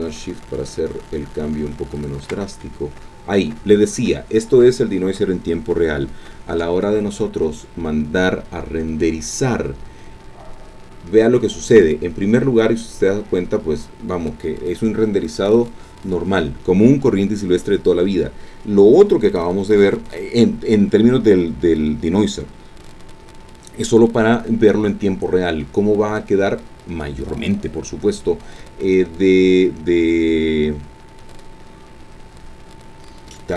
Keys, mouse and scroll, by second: 2.0 shift+click, 6.5 F12, 10.5-11.1 scroll down 4, 13.2-15.4 scroll up 2.